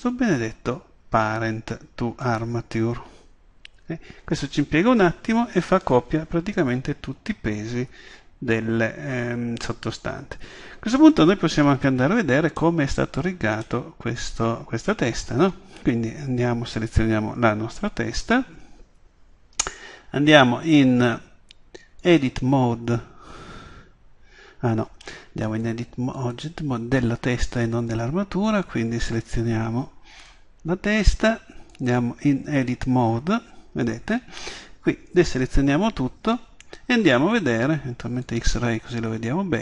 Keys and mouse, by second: 2.2 click, 12.6-16.0 middle drag, 25.5 click, 26.3-27.4 drag, 28.5-30.5 right drag, 32.9 click, 33.7-38.3 middle drag, 35.2 a.